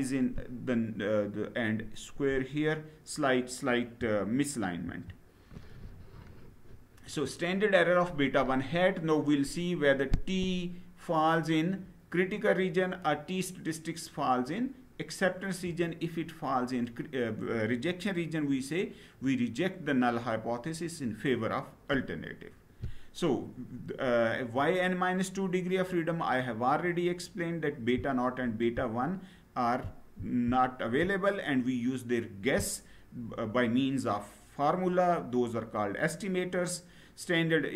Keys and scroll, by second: 4.6 Down.